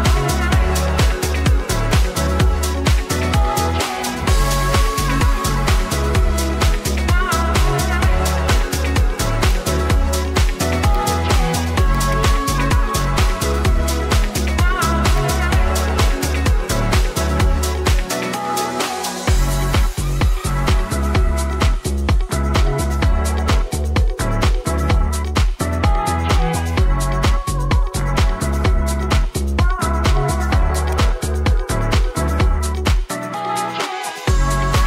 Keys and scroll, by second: 31.6 Delete.